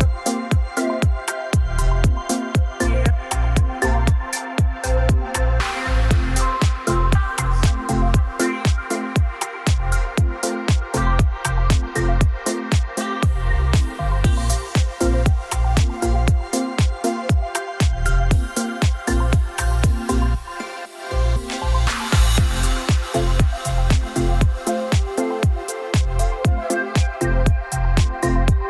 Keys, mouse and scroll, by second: 0.2 click, 0.4 click, 1.3-2.0 scroll, 2.0 click, 2.5 scroll, 2.6-3.1 scroll down 7, 3.4 scroll, 3.4 o, 5.5 click, 6.5 click, 6.8 Escape, 7.2 scroll, 7.4-7.7 scroll down 3, 7.7 click, 8.1-9.3 scroll down 8, 9.3-9.8 scroll up 4, 11.3 click, 12.3 F3, 13.4 click, 14.1 m, 14.7 middle click, 14.7 middle click, 14.8 middle click, 15.5 click, 17.1 typing, 17.6 Return, 18.6 typing, 24.4-25.6 drag, 25.6 Right.